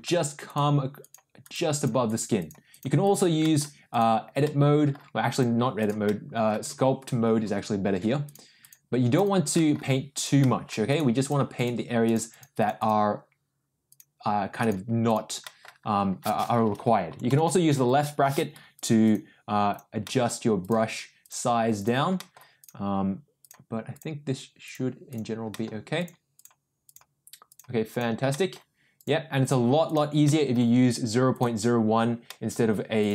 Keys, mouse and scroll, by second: 0.4 click, 1.0 click, 1.4 click, 1.7 click, 2.0 click, 2.3 click, 2.7 click, 3.0 click, 3.4 middle click, 3.9 click, 4.4 middle click, 5.3 click, 5.7 click, 6.0 middle click, 7.0 ctrl+z, 8.2 click, 8.6 click, 9.1 click, 9.5 middle click, 10.1 click, 10.4 middle click, 10.8 click, 11.2 click, 11.5 click, 12.0 click, 12.3 click, 12.5 click, 12.7 click, 13.9 click, 14.6 click, 15.0 click, 15.4 middle click, 17.0 [, 17.2 [, 17.4 [, 17.7 [, 18.7 click, 19.0 click, 19.7 click, 20.0 middle click, 20.6 click, 21.2 click, 21.7 click, 22.1 middle click, 22.6 click, 23.4 click, 23.9 click, 24.6 click, 25.0 click, 25.5 middle click, 25.9 click, 26.3 click, 26.8 click, 27.4 click, 27.9 click, 28.3 middle click, 28.9 click, 29.4 click, 29.8 click, 30.2 middle click, 31.3 click, 32.2 middle click, 32.9 click.